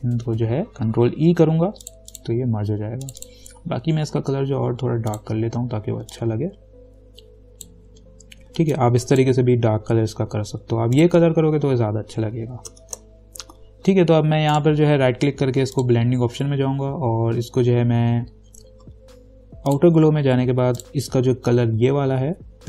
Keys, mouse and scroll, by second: 1.1 ctrl+e, 2.1-11.2 drag, 13.0 ctrl+-, 14.7 right click, 16.0 click, 19.9 click, 19.9 click.